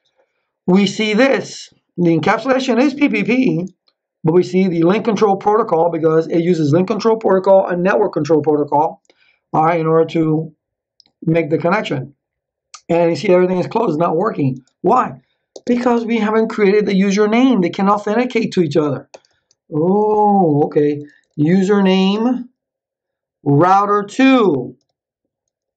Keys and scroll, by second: 15.5 space, 19.0 BackSpace, 20.7-22.3 typing, 23.5 r, 24.8 2.